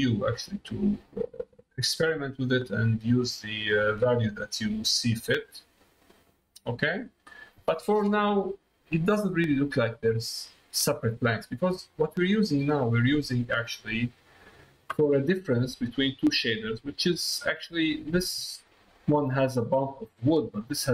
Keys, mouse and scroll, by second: 2.0-4.1 drag, 5.9 middle click, 6.5 middle click, 7.8 middle click, 9.2 middle click, 10.1 middle click, 13.3 middle click, 14.3 middle click, 15.1 middle click, 16.8 click, 17.8 middle click, 18.6 middle click.